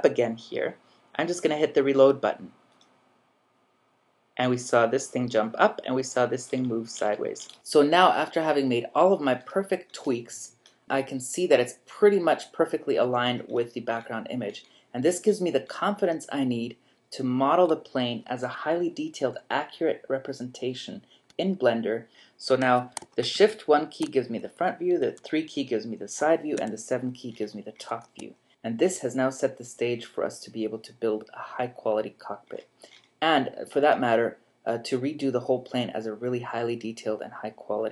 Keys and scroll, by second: 23.3 typing, 25.0 typing, 26.6 7.